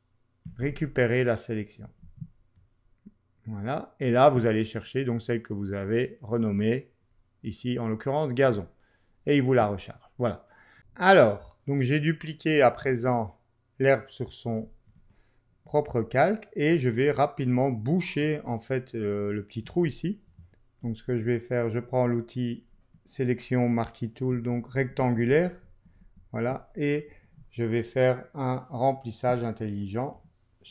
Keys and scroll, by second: 20.3 m, 24.3 Down, 30.1 shift+F5.